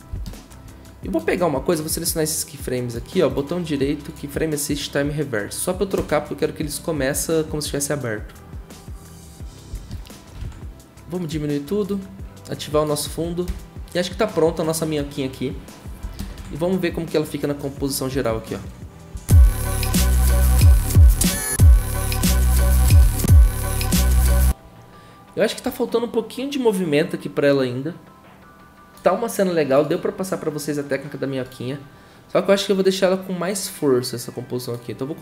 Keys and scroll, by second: 9.7 ctrl+a, 16.4 ctrl+w, 19.1 0, 21.3 0, 23.1 0.